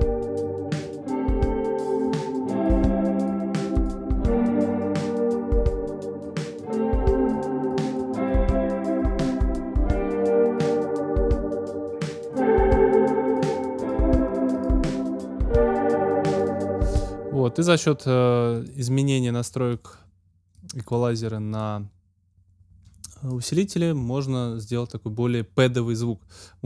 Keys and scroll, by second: 16.8 space.